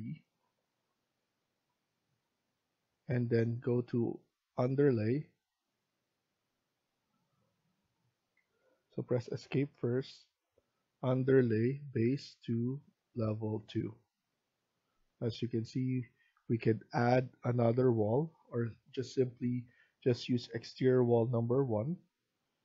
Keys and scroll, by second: 8.2 Escape, 8.5 Escape, 14.6 Escape, 18.1 Escape.